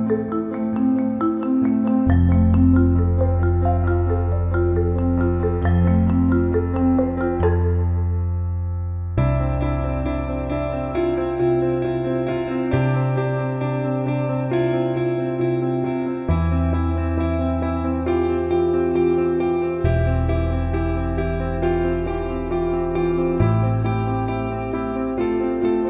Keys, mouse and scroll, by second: 1.2 drag, 1.5-2.0 alt+middle drag, 3.8 click, 5.1 click, 6.1 click, 6.5 alt+middle click, 8.9 alt+shift+middle click, 9.1 alt+middle click, 11.7 shift+click, 12.3-15.8 drag, 16.5 click, 16.7 click, 17.6 ctrl+b, 24.2 click, 24.5 alt+middle click, 25.0 alt+middle click.